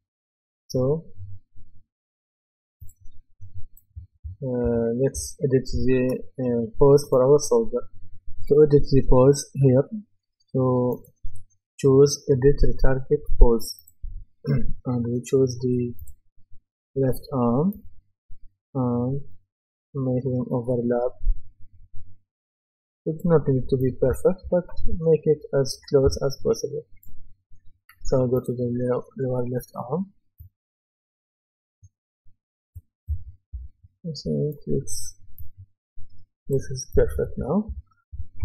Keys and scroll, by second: 3.7-5.7 typing, 23.8-26.9 typing, 32.8-34.3 typing, 36.7-38.4 typing.